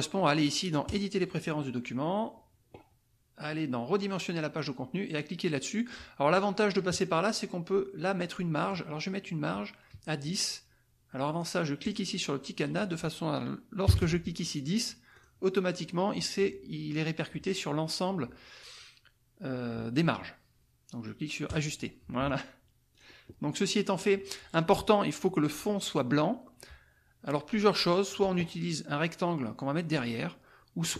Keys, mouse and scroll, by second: 0.9 click, 4.1 click, 8.3 click, 11.8 click, 12.7 click, 13.8 KP_0, 15.1 click, 21.4 click, 22.9 click.